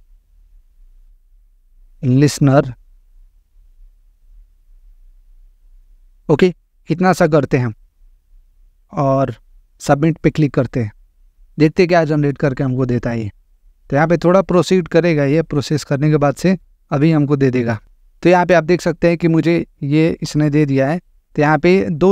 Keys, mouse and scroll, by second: 0.0-2.3 typing, 11.0 click, 17.8 click.